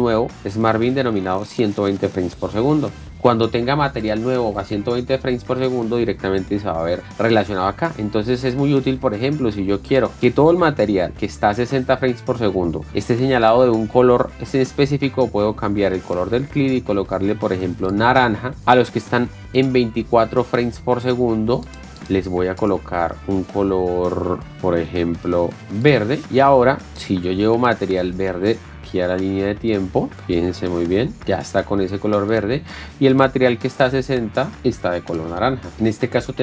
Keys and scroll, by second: 11.1 ctrl+a, 35.7 Caps_Lock.